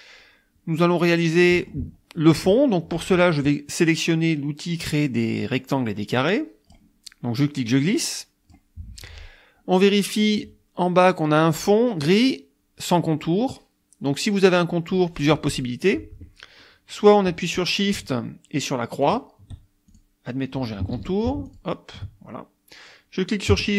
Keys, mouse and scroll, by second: 1.1 middle click, 1.5 click, 6.2 click, 7.4-8.7 drag, 19.1 shift+click, 19.9 shift+click, 21.0 ctrl+z, 21.5 ctrl+shift+click.